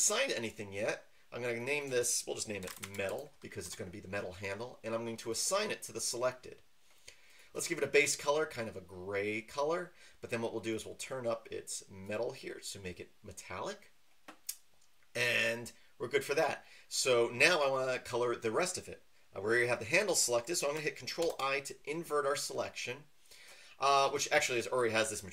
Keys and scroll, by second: 2.6-3.1 typing, 3.6 Return, 21.2 ctrl+i.